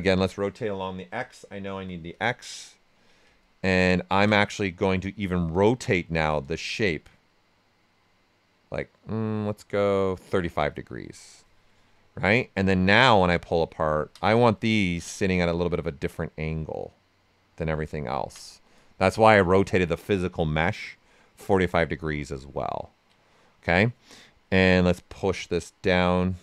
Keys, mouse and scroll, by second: 0.8-2.2 typing, 3.4-6.4 ctrl+right drag, 6.4-12.6 shift+drag, 12.6 click, 13.7 ctrl+right click, 14.9-17.9 drag, 17.9 ctrl+right click, 18.7 right click, 19.5 alt+right click, 22.0 right click, 22.4 ctrl+right click, 23.3-24.9 right drag, 24.9-26.4 drag.